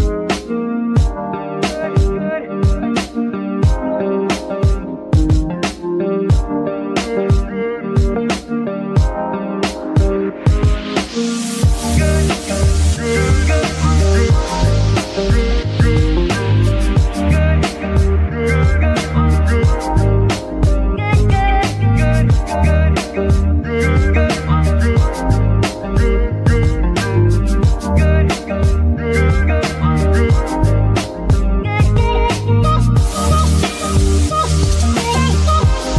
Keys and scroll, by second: 1.6 z, 17.9 g, 18.6 Tab, 20.7 z, 21.1 g, 21.6 Escape, 22.4 s, 24.1 KP_3, 24.6 Tab, 25.2 s, 26.6 z, 27.4 g, 28.9 z, 29.9 shift+z, 31.3 g, 34.9 z.